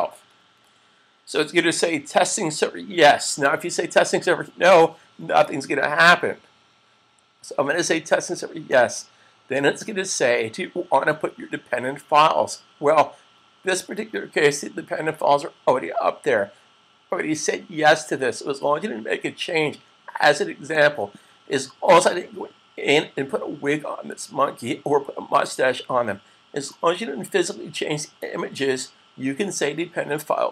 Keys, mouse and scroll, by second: 0.1 super+fn+F12, 8.8 click, 20.5 click.